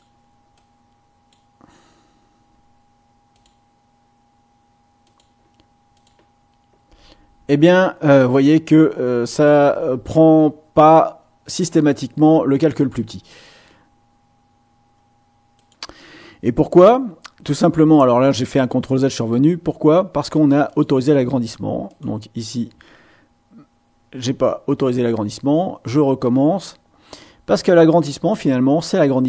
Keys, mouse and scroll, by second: 0.5 click, 3.3 click, 5.0 click, 5.9 click, 15.5 click, 20.7 click, 21.9 click, 22.6-24.5 drag, 25.8-29.2 drag.